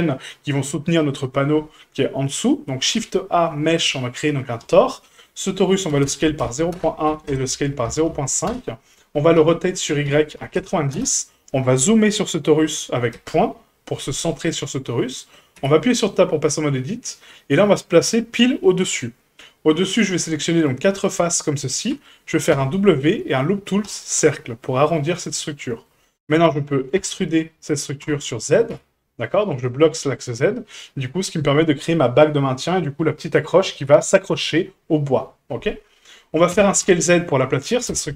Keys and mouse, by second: 2.8 shift+a, 5.9 s, 7.1 s, 9.4 r, 13.1 KP_Decimal, 14.6-15.3 middle drag, 15.5 Tab, 16.1-18.1 middle drag, 18.8 middle click, 20.6 right click, 21.0 shift+right click, 21.4 shift+right click, 22.5 w, 24.8-25.8 middle drag, 27.0 e, 30.6 shift+middle click, 31.0 middle click, 36.5 s.